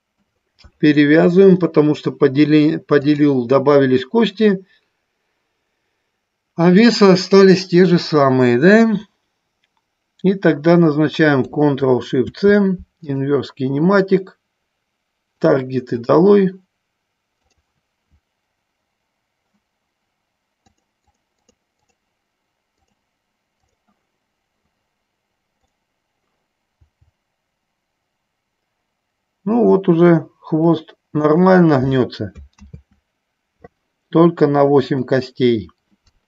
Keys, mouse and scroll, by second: 3.4-7.1 drag, 15.6 click, 21.0 click, 21.3 click, 21.7 click, 22.1 click, 23.1 click, 23.8 click, 31.5 click, 33.1 ctrl+z, 34.9 click.